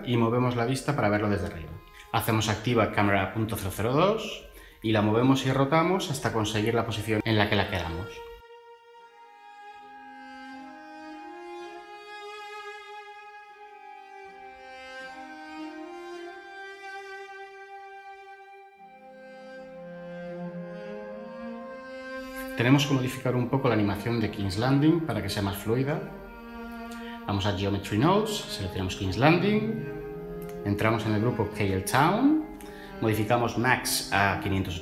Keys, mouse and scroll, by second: 8.1-8.6 typing, 31.7 Tab, 33.2-33.6 typing, 33.9 Return.